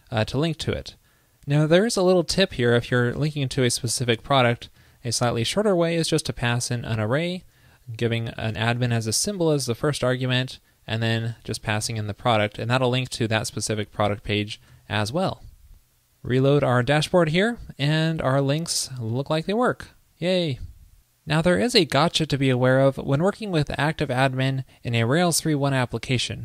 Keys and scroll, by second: 3.2 alt+Left, 5.0 shift+super+Right, 12.4 super+Right, 14.9 super+s, 16.5 super+r.